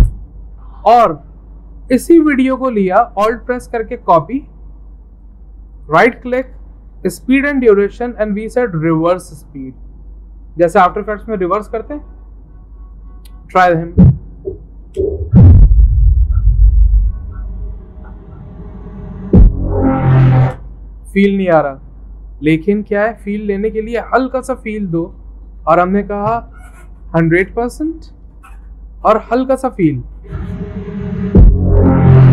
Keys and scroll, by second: 26.7-27.8 typing.